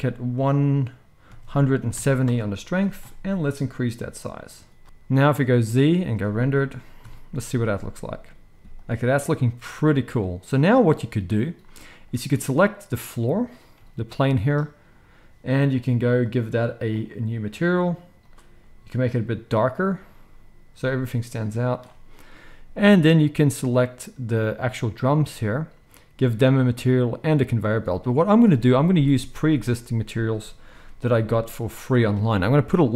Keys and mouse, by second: 5.4 z, 6.9 KP_0, 8.5 g, 8.8-11.9 middle drag, 11.9 click, 12.0-16.1 middle drag, 13.7 g, 16.1 click, 16.3-16.8 middle drag, 16.8-18.2 drag, 18.2-21.7 middle drag, 23.6 click, 25.0 click, 27.5 z, 27.6-28.7 middle drag, 29.3 ctrl+s, 29.4-32.9 middle drag, 30.6 n.